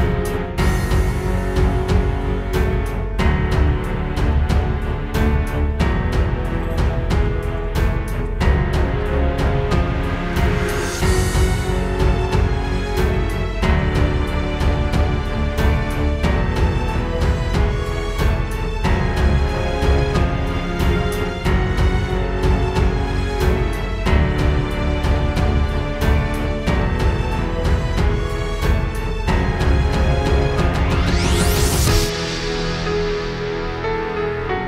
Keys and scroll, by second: 0.0 super+z, 1.8 super+z, 7.3 space, 10.3 super+z, 10.8 super+space, 11.0 super+space, 11.2 super+space, 19.1 space, 19.6 space, 21.1 space, 21.6 super+space, 21.8 super+space, 23.0 space, 23.6 alt+super+space, 28.8 super+g, 31.7 space, 32.2 super+space, 32.6 super+space, 32.9 super+space, 33.4 super+space.